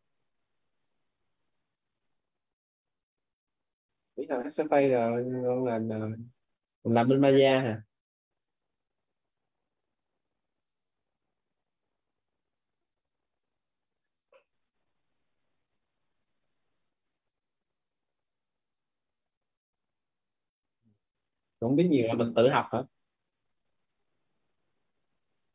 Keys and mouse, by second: 9.8-23.1 typing.